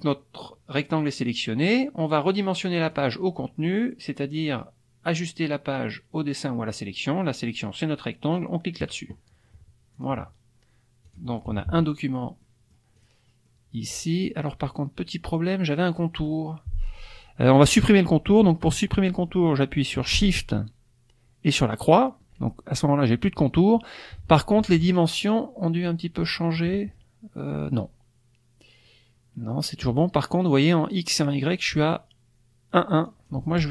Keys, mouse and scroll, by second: 2.8 click, 8.8 click, 9.9 click, 11.1 click, 11.5 KP_Subtract, 12.4 middle click, 12.4-12.9 scroll up 1, 13.0 click, 13.5 middle click, 13.5-14.0 scroll up 1, 21.7 shift+click, 24.9 click, 25.2 click, 33.1 click.